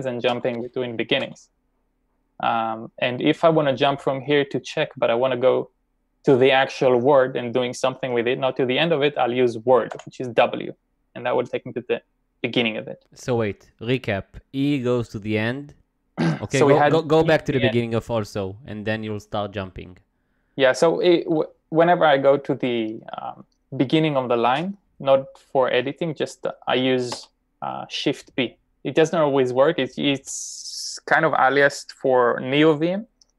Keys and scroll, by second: 1.0 b, 1.7 b, 10.0 w, 27.1 b.